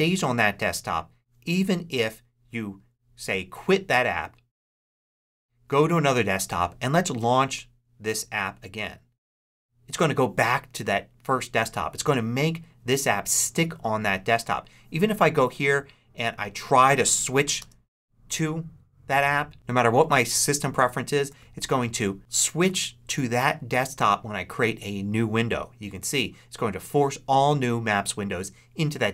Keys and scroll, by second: 17.5 super+Tab.